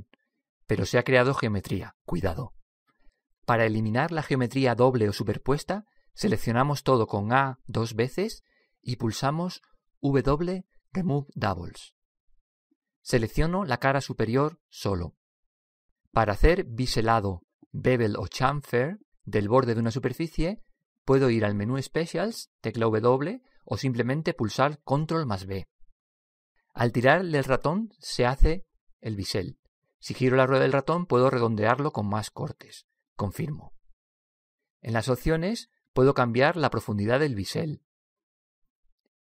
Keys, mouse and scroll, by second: 7.8 a, 8.2 a, 10.1 w, 13.1-14.9 middle drag, 15.0 click, 15.6-17.9 right drag, 25.8 ctrl+b, 36.4 click.